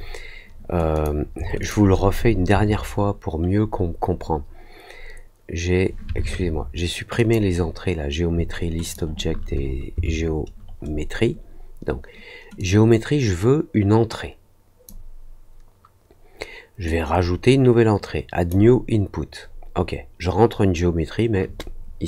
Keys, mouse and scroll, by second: 0.9 click, 1.5 shift+click, 7.1 click, 8.8 shift+click, 12.5-14.8 drag, 16.8 click.